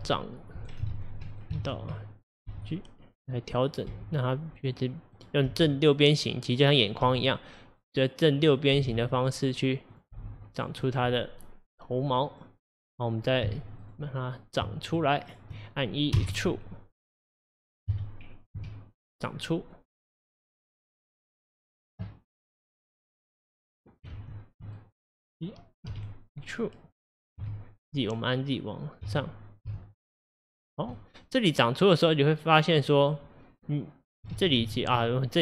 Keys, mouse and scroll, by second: 0.0 h, 0.7 right click, 1.4 click, 1.6 ctrl+z, 2.5 g, 3.7 click, 3.9 g, 5.2 click, 5.5 g, 6.8 click, 7.1 g, 8.4 click, 8.8 g, 10.0 click, 10.2 g, 10.9-13.5 middle drag, 13.5 3, 13.9 click, 14.9 shift+click, 15.3 shift+click, 16.2 e, 17.9 KP_1, 18.6 KP_3, 21.0-22.7 middle drag, 22.7 click, 23.3 click, 24.2 ctrl+z, 24.8-25.9 middle drag, 25.9 e, 31.0-33.5 middle drag, 33.5-34.4 scroll down 1, 34.4 ctrl+z, 34.7 ctrl+z.